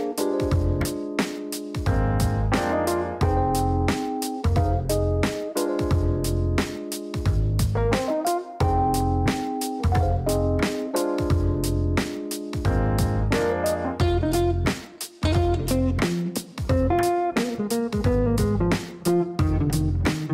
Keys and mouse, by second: 0.5 click, 1.6 click, 2.9-5.3 typing, 6.1 click, 7.6-9.1 typing, 10.2 click, 13.8 click, 15.0 click, 18.0 click, 18.7 click, 20.1 click.